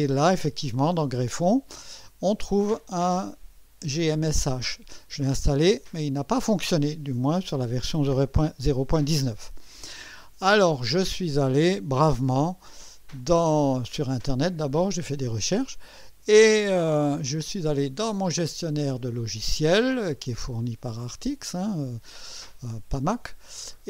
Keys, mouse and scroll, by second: 5.8 click, 12.9 click, 16.0 click.